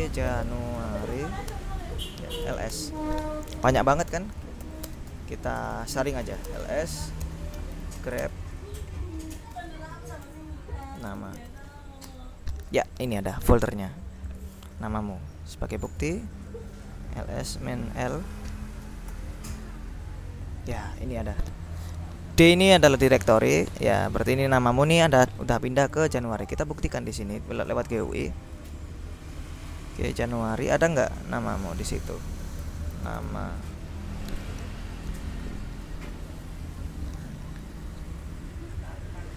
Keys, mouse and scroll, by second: 0.1 ctrl+shift+j, 0.2 ctrl+shift+a, 0.4 ctrl+shift+n, 0.5 ctrl+shift+u, 0.8 ctrl+shift+a, 1.2 ctrl+shift+r, 1.3 ctrl+shift+i, 1.6 ctrl+shift+Return, 2.6 s, 2.8 Return, 4.7 ctrl+l, 4.9 ctrl+space, 5.1 ctrl+l, 5.6 ctrl+BackSpace, 6.3 ctrl+l, 6.5 ctrl+space, 7.1 ctrl+shift+\, 7.3-12.1 typing, 12.1 Return, 14.4 click, 15.3 Up, 16.0 ctrl+a, 16.5 ctrl+Right, 17.5 space, 17.7 -, 19.0 l, 19.1 Return, 22.9-24.0 drag, 24.2 click, 25.9-27.2 drag, 28.9 click, 30.8 click, 32.6 ctrl+i, 33.0 ctrl+n, 33.1 ctrl+a, 33.2 ctrl+m, 33.4 ctrl+a.